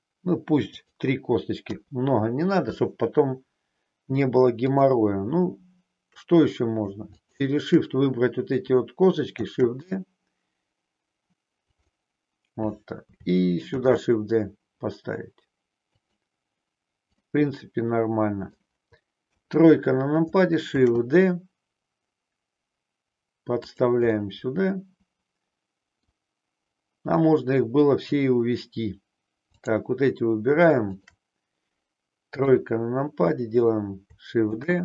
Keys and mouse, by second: 1.6 KP_1, 9.3 shift+d, 11.6 click, 13.7 shift+d, 15.9 click, 17.2-18.5 middle drag, 19.2 KP_3, 20.7 shift+d, 23.7 click, 24.1-26.2 middle drag, 29.5 click, 32.5 KP_3, 34.5 shift+d.